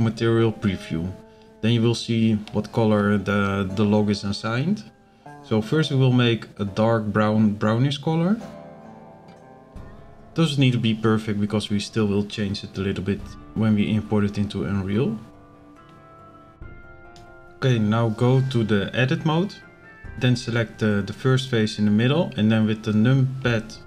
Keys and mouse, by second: 18.7-19.4 drag, 20.4 middle click, 21.5 ctrl+KP_Add, 21.8 ctrl+KP_Add.